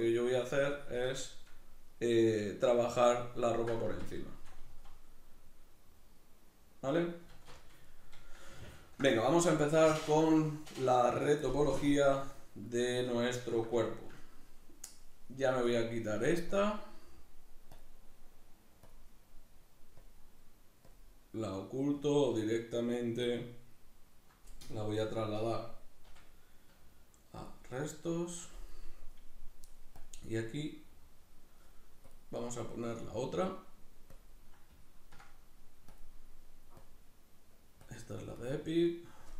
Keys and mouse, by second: 0.0-1.2 shift+drag, 1.2-15.7 shift+middle drag, 3.9 Tab, 4.7 z, 7.3 alt+q, 15.7 right click, 16.5-26.0 drag, 26.0 m, 30.0-34.9 drag, 34.9-35.9 ctrl+middle drag, 35.9-39.3 drag.